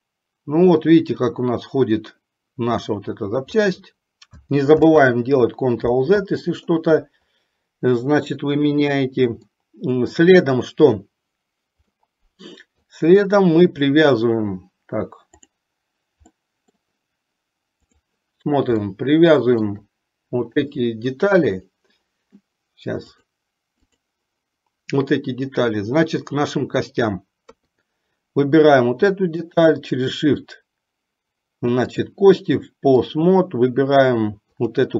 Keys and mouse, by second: 4.9 ctrl+z, 9.6-10.5 shift+middle drag, 12.0-13.1 middle drag, 15.4 click, 16.5 middle click, 18.0 click, 19.0-19.9 shift+middle drag, 20.5 click, 23.1 click, 24.0 click, 27.6 KP_3, 31.9-33.5 drag, 34.8 click.